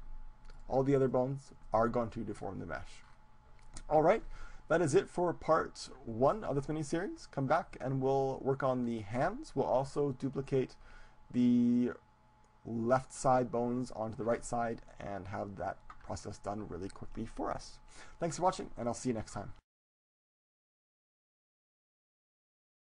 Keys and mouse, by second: 0.9-2.5 drag, 1.5-5.0 right drag, 3.8-5.0 drag, 8.3-10.3 middle drag.